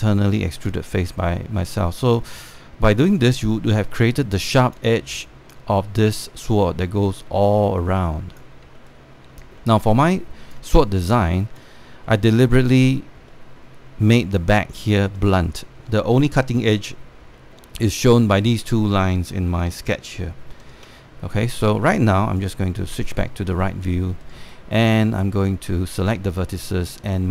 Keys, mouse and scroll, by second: 1.6 alt+click, 3.0 alt+click, 5.9-8.0 alt+drag, 8.1 alt+click, 9.4 alt+middle click, 10.7 alt+click, 11.8 alt+click, 14.0 alt+middle click, 15.8 alt+middle click, 16.8 alt+middle click, 18.0 alt+middle click, 20.3 alt+click, 20.8 alt+middle click, 22.0 click, 22.0 space, 23.8 alt+middle click, 24.3 scroll up 1, 24.8 alt+middle click, 25.2 right click.